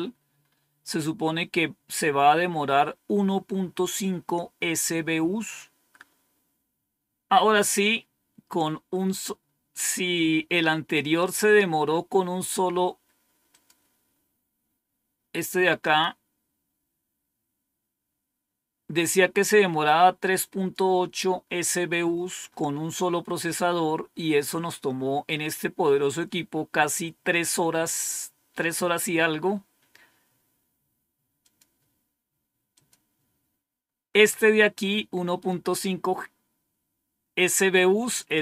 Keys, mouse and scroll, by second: 3.8-5.9 drag, 13.3 click, 15.6 click, 19.7 click, 31.2 click, 32.6 click, 38.0 click.